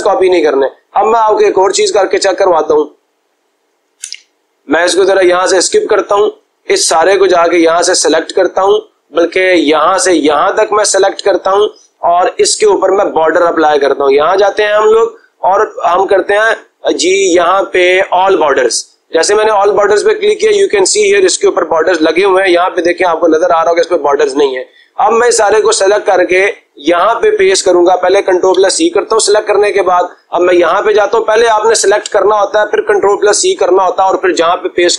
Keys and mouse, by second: 2.6 click, 3.9 Escape, 8.5 click, 8.6 click, 11.5 click, 14.5 click, 18.3 click, 19.6 click, 26.3-27.4 drag, 28.4 ctrl+c, 30.4 click.